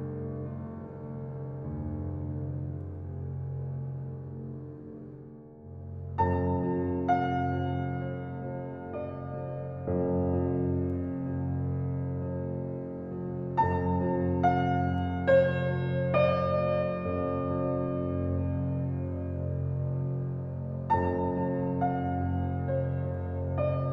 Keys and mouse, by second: 0.0-0.6 drag, 0.8-1.1 drag, 1.2 click, 1.5 click, 1.9 drag, 3.0-4.1 drag, 9.3 drag, 9.6-9.9 drag, 10.0-10.8 drag, 10.9 click, 11.1-11.6 drag, 12.0 click, 12.6-12.9 drag, 13.5-13.9 drag, 14.0-14.5 drag, 14.6 click, 15.4 click, 15.7 click, 16.3-16.7 drag, 16.8-17.2 drag, 17.3-17.8 drag, 18.1-18.9 drag, 19.0-19.4 drag, 19.6-20.0 drag, 20.6-20.9 drag, 21.2 drag.